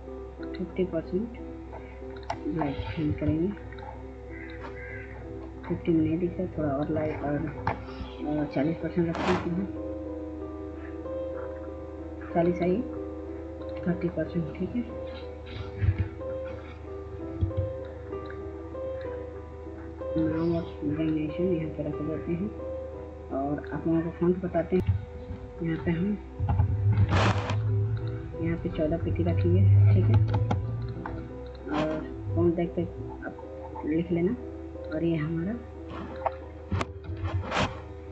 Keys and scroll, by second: 2.8 F2, 15.6 F3, 17.1 F2, 24.1-24.8 typing, 26.2 typing, 26.7 ctrl+z, 28.4-29.2 typing, 29.9 ctrl+space, 36.7 ctrl+a.